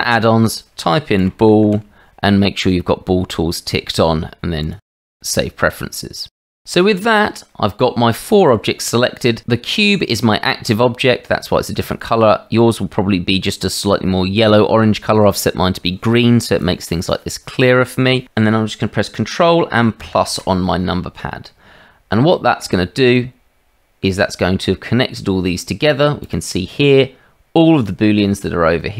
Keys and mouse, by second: 20.0 ctrl+KP_Add, 22.3-22.6 middle drag, 22.8 shift+middle drag.